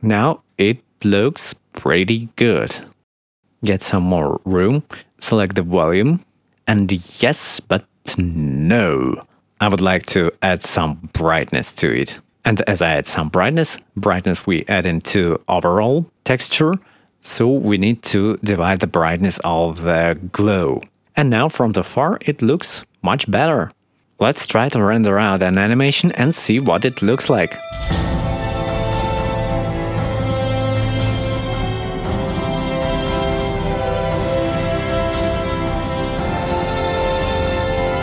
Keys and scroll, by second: 12.6 5, 14.9 1, 15.2 0, 15.5 Return, 19.6 1, 19.7 5, 20.4 2, 20.5 0, 20.6 Return, 22.3 ctrl+s, 26.5 ctrl+s, 27.1 ctrl+F12.